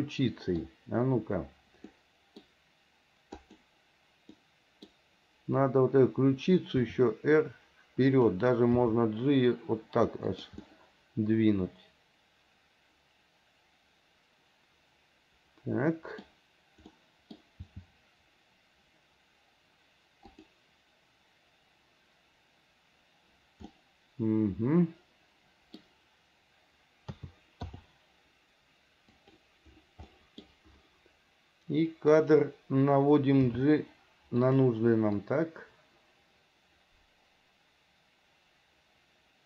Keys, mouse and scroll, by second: 2.1 middle click, 3.6 click, 4.6 middle click, 7.0 r, 9.0 g, 10.8-16.5 middle drag, 16.5 scroll down 1, 17.1 middle click, 17.6 scroll down 1, 17.9 g, 23.9-26.0 middle drag, 27.4 a, 27.9 i, 29.3 click, 30.4 middle click, 32.3 click, 33.6 g, 35.4-39.4 drag.